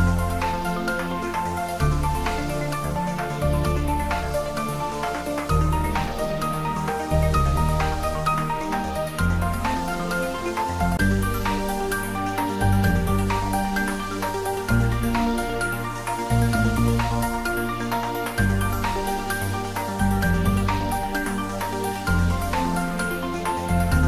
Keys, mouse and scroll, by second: 2.0 Tab, 3.7 middle click, 4.7 Tab, 6.1 ctrl+r, 8.9 click, 10.9 ctrl+z, 11.6 middle click, 12.7 Tab, 13.3-13.7 scroll down 1, 13.7 middle click, 14.9 right click, 15.7 click, 16.2-16.6 scroll up 1, 17.0-21.7 middle drag, 21.7-22.2 scroll down 1, 22.2-24.0 middle drag.